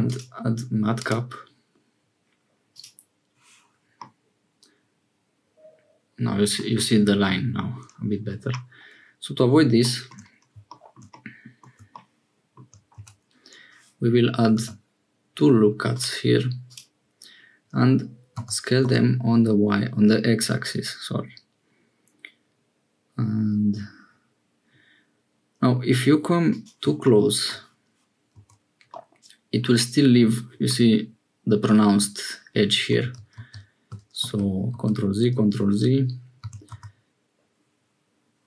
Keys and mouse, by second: 4.1-6.7 middle drag, 11.1 click, 13.0 Tab, 14.5 ctrl+r, 18.4 s, 28.4 Tab, 28.9-30.5 middle drag, 32.8 Tab, 33.4 ctrl+z, 34.3 ctrl+z, 36.4 s.